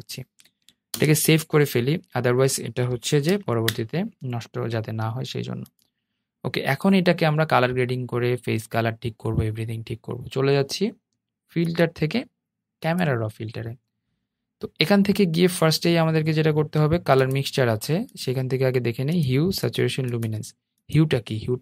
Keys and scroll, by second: 0.0 super+s.